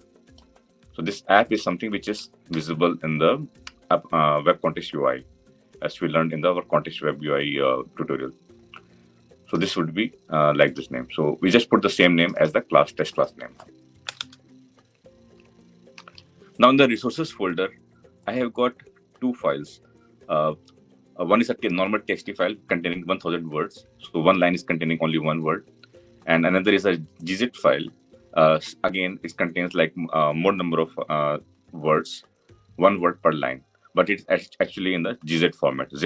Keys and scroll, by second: 2.4 ctrl+v.